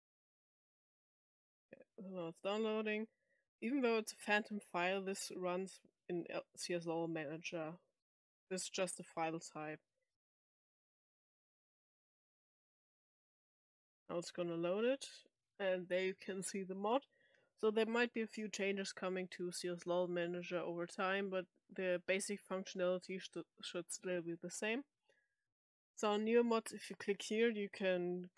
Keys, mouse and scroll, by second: 4.1 click, 5.5-6.5 drag, 7.3-7.6 drag, 8.1 click, 8.9-9.6 drag, 11.3 click.